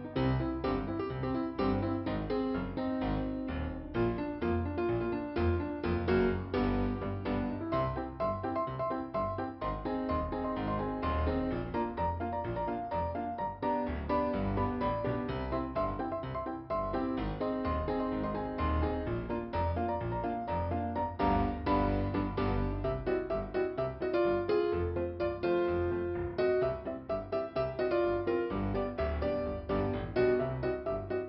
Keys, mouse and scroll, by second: 0.9 click, 4.3 click, 4.5 click, 6.9 click, 7.7 click, 7.9 click, 13.9 click, 14.7 click, 19.3 click, 21.2 click, 23.0 click, 23.2 click, 24.6 click, 25.5 click, 26.8 click, 27.8 click.